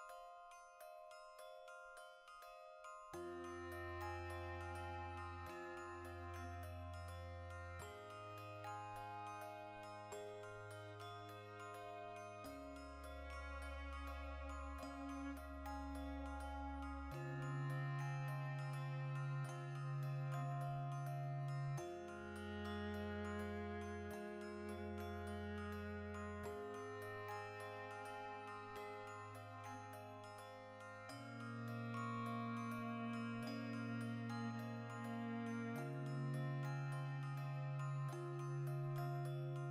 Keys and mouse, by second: 0.1 l, 0.4 ctrl+i, 0.6 h, 0.8-6.2 middle drag, 1.3 ctrl+z, 2.6 h, 4.0 3, 4.9 z, 5.9 2, 6.2 alt+right click, 6.4-8.6 middle drag, 7.7 z, 8.4 3, 8.6 alt+right click, 8.8 x, 9.3 middle click, 10.1-12.9 typing, 10.2 right click, 11.2-12.3 ctrl+middle drag, 12.3 click, 12.7 right click, 13.9 2, 14.1 right click, 14.4 f, 14.6-16.8 shift+middle drag, 16.2-24.4 typing, 16.8 right click, 18.5 click, 18.9 right click, 20.0 right click, 20.6 shift+middle click, 21.4 right click, 22.1 middle click, 22.7 right click, 23.7 right click, 23.8 middle click, 24.3 shift+right click, 24.9-26.1 ctrl+shift+middle drag, 25.6 2, 26.1 right click, 26.5 f, 26.8 shift+middle click, 27.3 right click, 27.6 f, 27.7-30.4 middle drag, 30.3-34.5 typing, 30.4 right click, 30.6 middle click, 31.2 right click, 31.3 middle click, 32.1 click, 32.8 right click, 34.1 right click, 34.6-36.0 middle drag, 35.8-39.7 typing, 36.0 right click, 37.9 click, 38.5 right click, 39.1 ctrl+middle click.